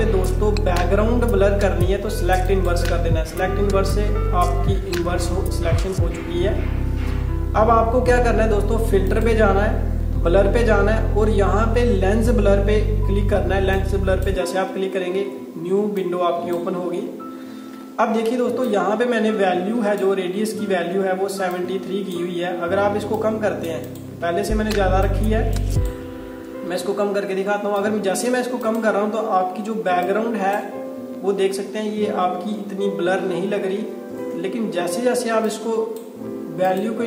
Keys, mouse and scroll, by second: 2.5 click, 9.1 click, 13.8 click, 35.5 click.